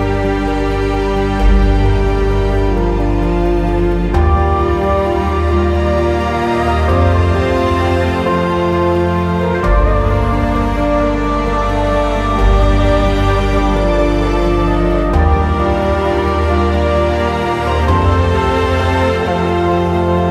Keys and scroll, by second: 2.2 w, 17.6 Delete.